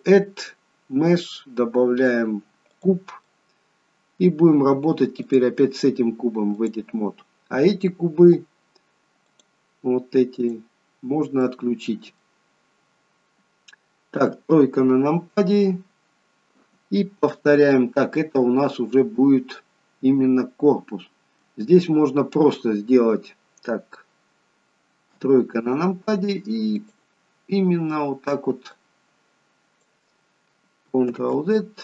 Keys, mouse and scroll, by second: 3.2 middle click, 5.2 click, 9.2 click, 10.4 click, 11.3-11.7 scroll down 1, 14.2 KP_3, 18.2 middle click, 25.1 KP_3, 26.8 click, 28.8 click, 31.2 ctrl+z.